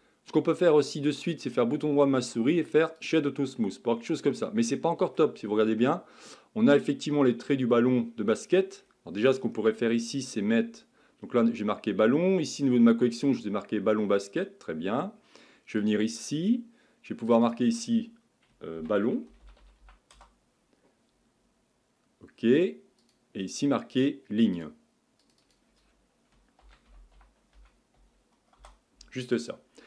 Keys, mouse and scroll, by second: 1.4-3.6 right drag, 3.6-5.5 middle drag, 5.5-5.9 scroll down 2, 5.9-8.9 middle drag, 15.8 click, 17.3 click, 17.4-21.5 drag, 21.5 l, 23.0-25.3 drag, 25.4 click.